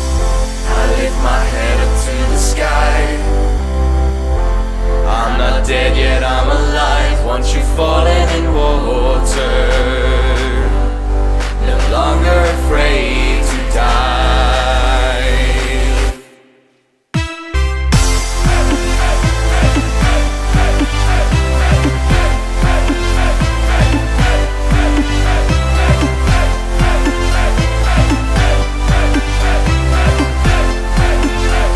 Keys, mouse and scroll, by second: 0.0-1.9 drag, 1.9-3.2 scroll down 2, 3.2 scroll down 5, 3.4 click, 5.0 click, 12.1 click, 16.0-17.8 drag, 19.4-20.1 scroll down 4, 20.1 middle click, 20.3-20.8 scroll down 2, 20.8-21.4 scroll up 4, 22.6-25.0 drag, 25.0-26.4 scroll down 6, 26.4 KP_7, 28.3 space, 29.0 click, 30.8-31.7 drag.